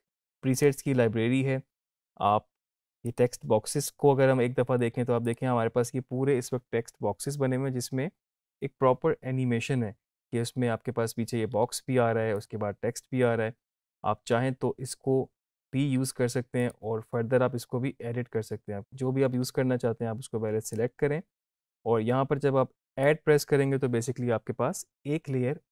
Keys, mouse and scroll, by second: 0.5 click, 8.5 click, 11.5-12.3 scroll down 1, 16.5 click.